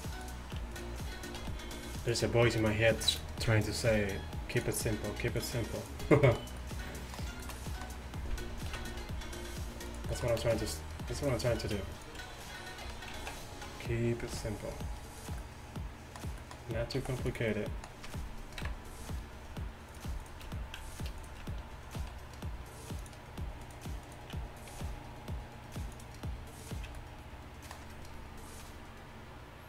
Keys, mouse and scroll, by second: 1.4 r, 3.9 r, 8.8 ctrl+b, 12.9 r, 15.5 click, 17.0 s, 18.7 KP_1, 22.0 r, 24.8 g, 27.0 click, 27.2-29.6 middle drag.